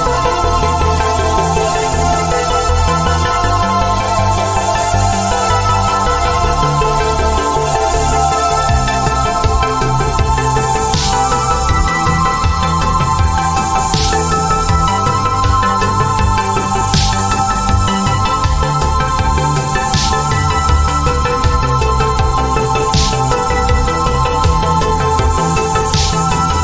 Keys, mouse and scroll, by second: 2.3 z, 3.7 z, 5.3 click, 8.3 shift+Num_Lock, 9.0 z, 11.3 click, 12.0 z, 12.4 click, 18.6 click, 21.1 click, 25.4 ctrl+z, 26.4 click.